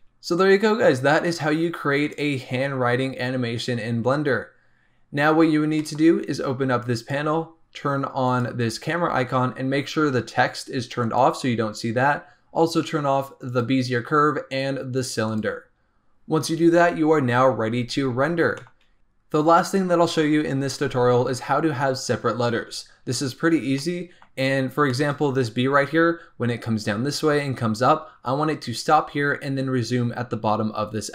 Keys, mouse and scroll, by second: 0.0-2.0 shift+middle drag, 2.0 click, 4.9 scroll up 1, 5.7-6.9 shift+middle drag, 6.9-9.9 drag, 11.0 click, 13.4 click, 14.9 click, 15.2 click, 18.5 shift+middle click, 18.9 z, 22.4-23.7 scroll up 2, 23.7 middle click, 24.5-24.8 scroll down 1, 24.8 shift+middle click, 25.0-25.5 scroll up 3, 26.2-28.5 scroll up 1.